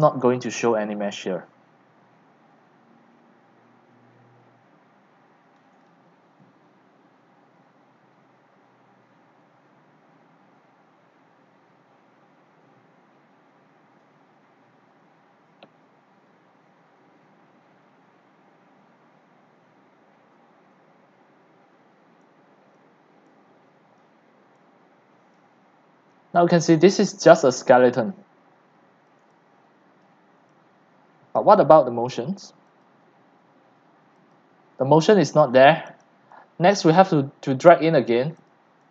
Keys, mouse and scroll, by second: 22.2 click, 22.8 click, 24.0-24.7 drag, 24.7-25.0 right drag, 25.0 drag, 27.2 right click, 27.3 click, 27.4 right click, 29.1 click, 29.2 c, 30.0 click, 30.4 c, 30.9-31.3 c, 31.4 click, 31.5 c, 32.8-36.8 drag, 36.9-38.9 drag.